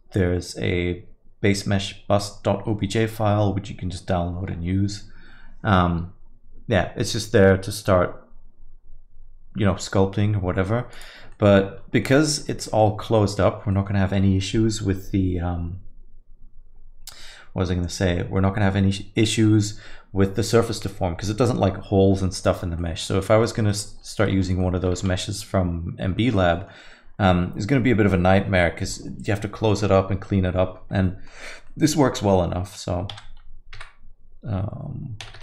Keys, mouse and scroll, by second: 11.3 alt+middle click, 11.8-12.6 scroll up 4, 12.0 alt+middle click, 12.6 alt+middle click, 13.1 alt+middle click, 13.7 middle click, 22.8 alt+middle click, 23.0 middle click, 23.3 scroll down 1, 23.4 alt+middle click, 23.7 middle click, 23.9 scroll down 1, 24.1 alt+middle click, 24.3 Tab, 24.6 alt+middle click, 24.9 a, 25.2 alt+middle click, 26.2 alt+middle click, 26.5 middle click, 27.8 alt+middle click, 31.0 alt+middle click, 31.6 alt+middle click, 33.1 s.